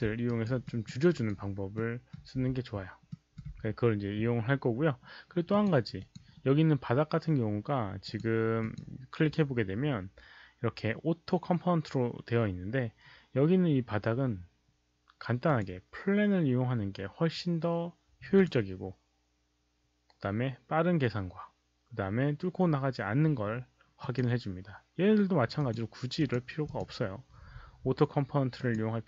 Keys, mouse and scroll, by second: 0.2 alt+right click, 0.6 alt+middle click, 1.0 alt+right click, 1.7 alt+middle click, 3.0 alt+middle click, 5.4 click, 5.6 alt+middle click, 5.6 alt+right click, 5.9 click, 8.0 click, 8.5 click, 13.7 click, 13.7 alt+middle click, 15.4 click, 17.5 click, 18.3 click, 24.0 click, 25.5 click, 26.1 click, 26.6 click, 28.5 click.